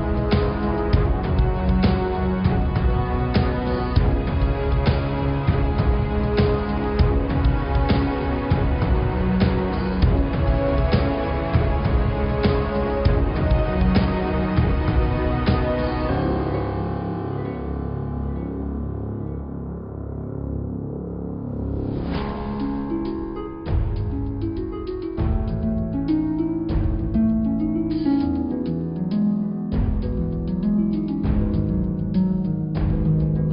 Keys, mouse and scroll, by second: 1.2 g, 2.6 click, 3.2-4.4 scroll up 2, 4.4 click, 5.4 g, 8.9 g, 10.9 click, 11.9 click, 12.5 middle click, 12.8-13.3 scroll down 10, 13.3 scroll up 3, 14.2 click, 15.7-16.3 scroll down 9, 16.3-17.3 scroll up 11, 17.4 click, 18.4 Tab, 18.8 Tab, 19.7-20.1 scroll down 4, 20.1 click, 21.1 Tab, 21.3 click, 21.8 Tab, 22.3 click, 22.7 Tab, 23.2 click, 24.1 middle click, 25.1 click, 25.8 click, 28.1 click, 29.2 click, 30.0 g, 32.7 click.